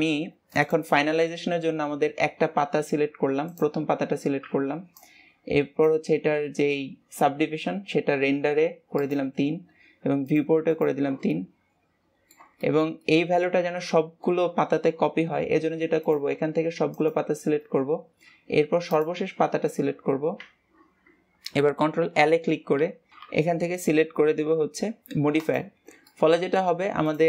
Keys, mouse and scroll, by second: 0.5 click, 1.1-2.1 middle drag, 2.1-3.4 scroll up 1, 3.4 click, 4.9-7.9 drag, 8.9-11.3 drag, 11.3-13.7 middle drag, 13.7 ctrl+s, 16.0 click, 16.9 shift+click, 18.9 shift+click, 21.9 ctrl+l, 26.0-27.0 middle drag, 27.0 click.